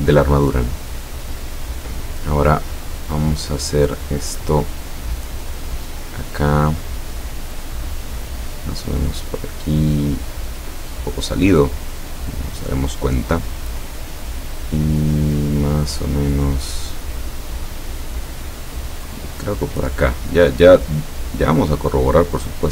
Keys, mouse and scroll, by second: 5.8 click, 6.7 click, 12.0 click, 19.1 click, 21.5-22.4 drag.